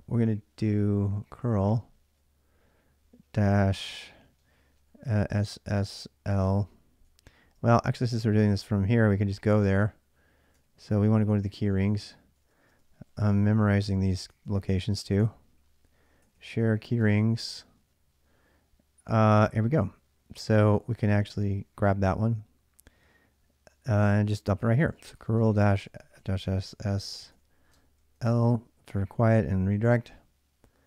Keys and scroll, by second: 0.9-2.5 typing, 4.4-10.2 typing, 10.4 ctrl+a, 10.6 ctrl+a, 11.6 ctrl+a, 12.2-14.0 typing, 15.1 Tab, 15.1 ctrl+a, 15.4 ctrl+a, 15.8-17.2 typing, 17.3 Tab, 20.0 Return, 20.3-21.0 typing, 24.5-28.0 typing.